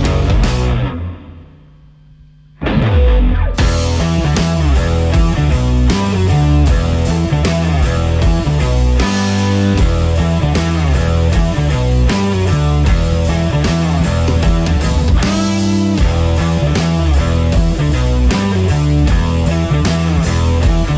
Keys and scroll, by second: 0.1 c, 4.0 Delete.